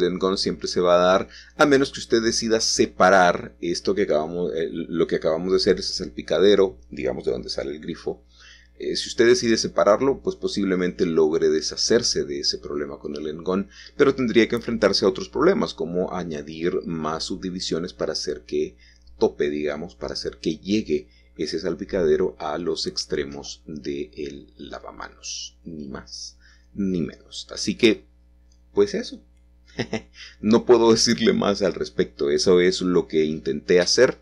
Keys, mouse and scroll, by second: 0.0 Escape, 0.6 ctrl+z, 3.9-5.0 alt+shift+drag, 5.1 shift+middle click, 5.6 typing, 7.9 ctrl+b, 10.2 shift+click, 10.6 Tab, 25.3 click, 25.9-28.0 scroll down 1, 27.6-29.7 middle drag, 29.7-31.4 scroll up 3, 31.9 middle click, 32.9 ctrl+s.